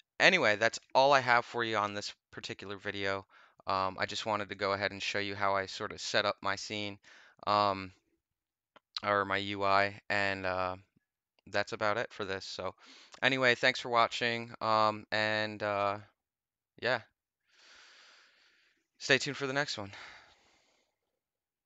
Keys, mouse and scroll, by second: 14.2 click, 21.6 click.